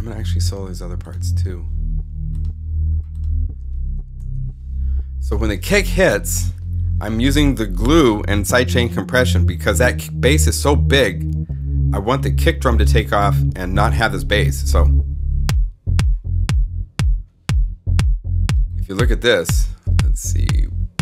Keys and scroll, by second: 4.1 alt+super+s.